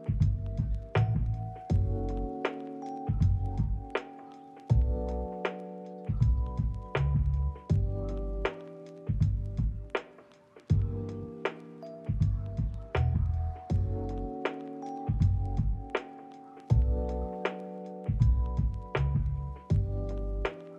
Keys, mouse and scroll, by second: 3.6 ctrl+middle click, 3.8 shift+middle click, 4.0 middle click, 4.8 double click, 12.0 ctrl+middle click, 13.2 middle click, 14.2 ctrl+middle click, 15.0 ctrl+middle click, 15.6 double click, 16.8 middle click, 18.0 double click, 20.3 ctrl+middle click.